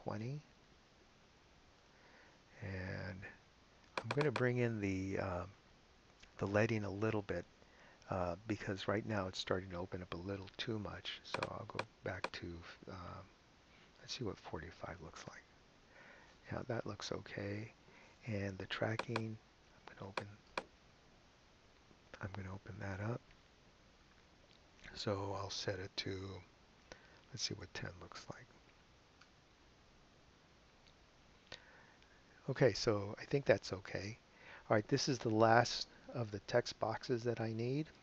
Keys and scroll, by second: 0.1 2, 1.8 Return, 14.1-15.0 typing, 15.2 Home, 22.6 BackSpace, 27.2-28.1 typing, 29.2 Return.